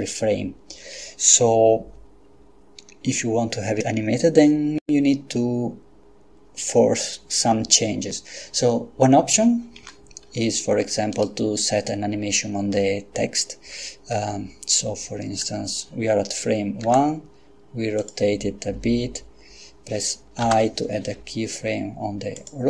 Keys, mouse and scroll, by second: 9.8 Escape, 11.1 right click, 16.8 r, 18.0 click, 20.4 i, 22.4 click.